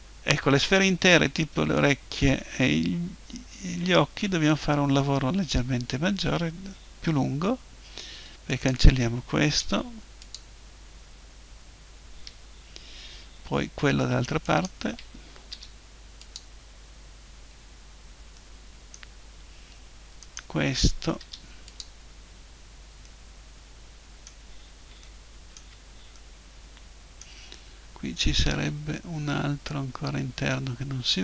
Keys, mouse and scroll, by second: 3.8-5.6 middle drag, 8.5-10.4 right drag, 9.6 Delete, 14.5-16.3 right drag, 15.5 Delete, 17.6-20.1 middle drag, 20.2-21.2 right drag, 21.2 Delete, 23.0-24.8 middle drag, 25.0 middle click, 28.4-31.2 middle drag.